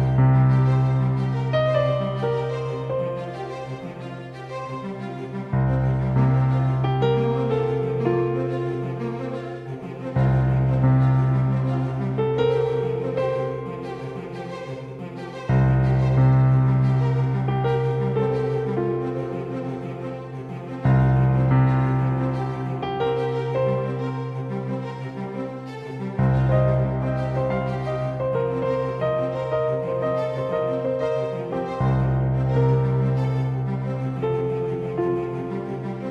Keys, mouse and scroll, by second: 7.5-9.8 drag, 21.2 Tab.